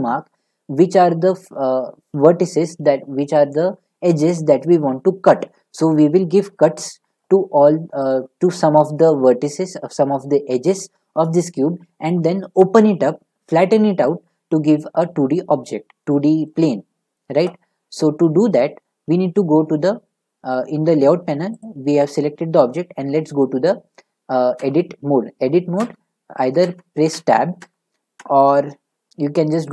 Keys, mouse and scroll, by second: 0.1 middle click, 8.6 scroll, 16.5 middle click, 21.6 click, 24.6 Tab, 25.8 Tab, 26.6 Tab, 27.1 Tab, 27.6 Tab, 28.2 Tab, 29.6 click.